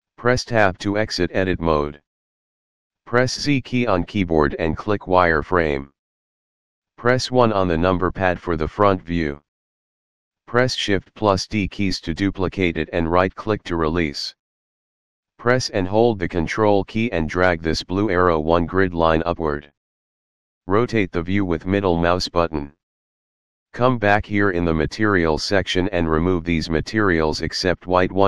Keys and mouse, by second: 0.6 Tab, 2.6 z, 4.3 click, 7.4 KP_1, 11.3 shift+d, 14.5 right click, 16.6 ctrl+click, 20.5 middle click, 27.8 click.